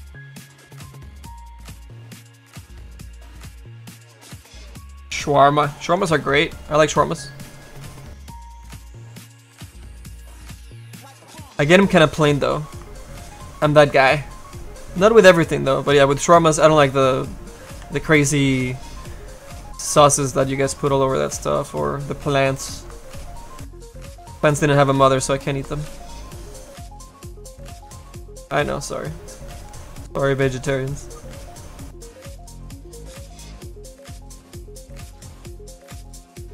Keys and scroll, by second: 12.0 s, 17.8 s.